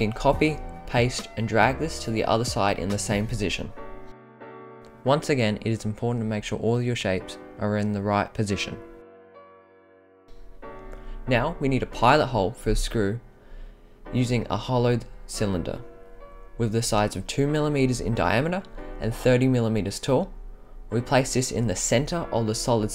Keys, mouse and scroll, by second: 5.2-5.6 middle drag, 6.0-6.4 scroll up 5, 7.8 click, 8.3 scroll up 2, 8.9 scroll up 1, 9.2-9.8 middle drag, 10.6 click, 11.5 click, 12.1 scroll, 12.2 scroll, 12.3 scroll, 12.3 scroll, 13.3-15.8 drag, 17.7-18.3 right drag, 18.9-20.9 drag, 21.3-22.4 right drag.